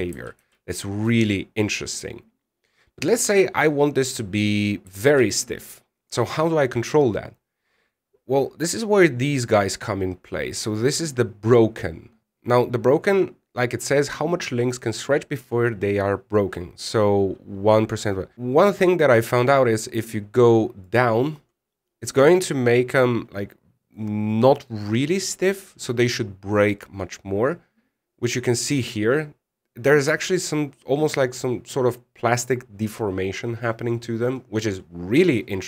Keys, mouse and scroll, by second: 1.1 alt+a, 1.5 middle click, 5.8 alt+a, 6.7 click, 27.4 click.